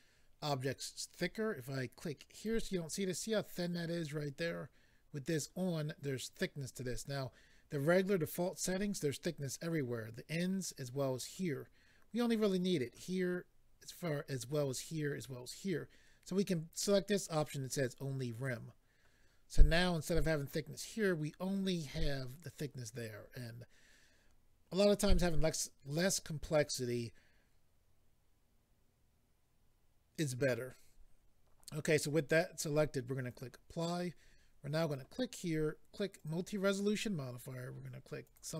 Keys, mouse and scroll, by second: 2.3 click, 2.4 click, 5.3 click, 18.3 click, 33.3 click, 33.4 click, 34.8 click, 34.9 click, 36.2 click, 36.3 click, 38.2 click, 38.3 click.